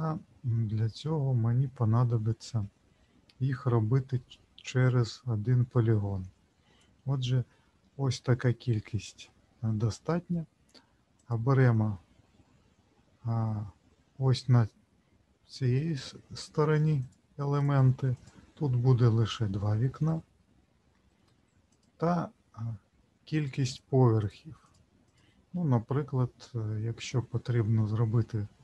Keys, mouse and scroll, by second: 11.1 click, 17.0 click, 17.6 click, 18.1 click, 21.7 click, 23.6 click, 24.2 click, 24.6 click, 25.0 click.